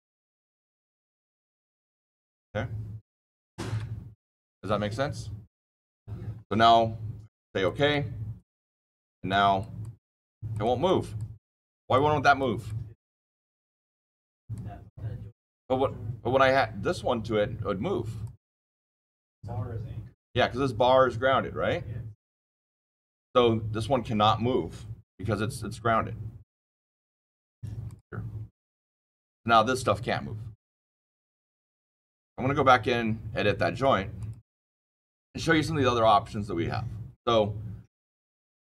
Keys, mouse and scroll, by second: 7.6 click, 8.5 click, 9.2 click, 9.7 click, 10.4 click, 10.8 click, 11.6 click, 12.3 click, 14.2 click, 18.2 click, 27.8 click, 28.7 click, 32.6 click, 34.1 click, 37.9 click.